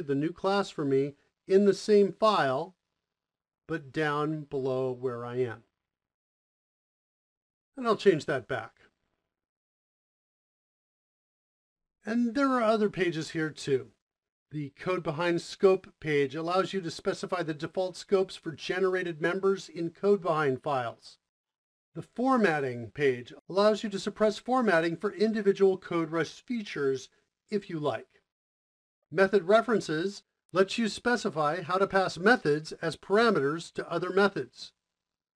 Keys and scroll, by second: 9.4 Home, 9.4 Right, 11.6 o.